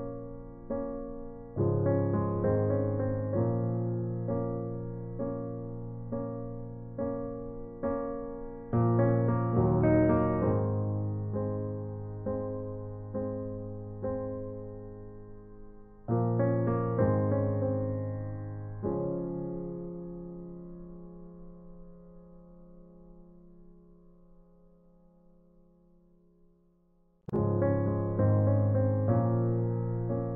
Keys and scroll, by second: 11.5 ctrl+i, 25.1-27.4 typing.